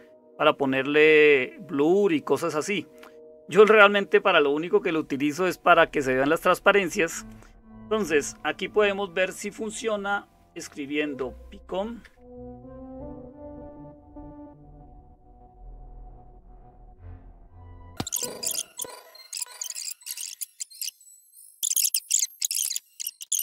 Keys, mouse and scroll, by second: 0.0-23.4 typing, 15.7 Return, 18.9 super+m, 21.2 ctrl+c, 21.3 Return, 21.3 Return.